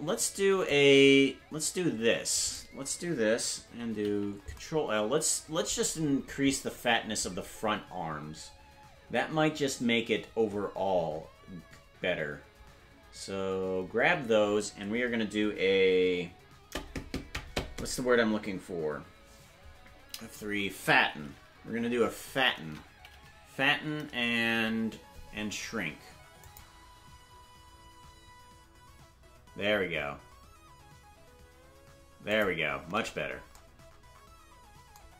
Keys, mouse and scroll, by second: 0.4 c, 4.6 ctrl+l, 33.5 Tab.